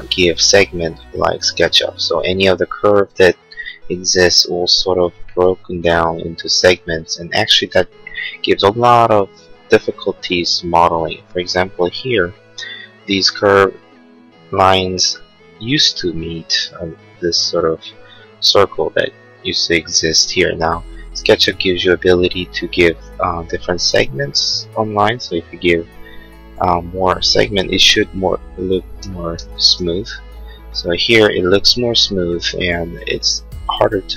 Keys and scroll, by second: 29.0 4, 29.4 8, 30.0 Return.